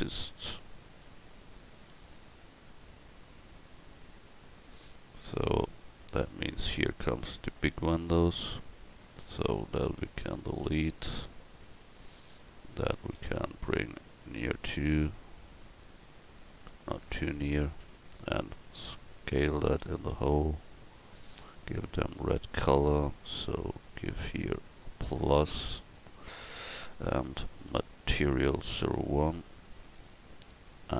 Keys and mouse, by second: 1.9 s, 8.4 Tab, 10.0 l, 11.1 x, 13.2 l, 17.8 Tab, 20.1 s.